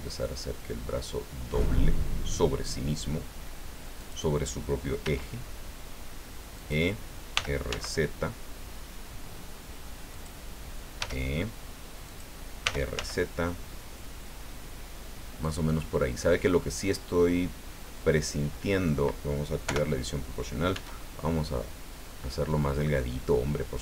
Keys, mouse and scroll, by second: 4.0 click, 5.0 e, 6.5 click, 7.3 r, 7.7 z, 10.1 click, 11.0 e, 12.0 click, 12.6 r, 12.9 z, 15.4 click, 15.8-19.0 middle drag, 19.6 o, 20.7 s.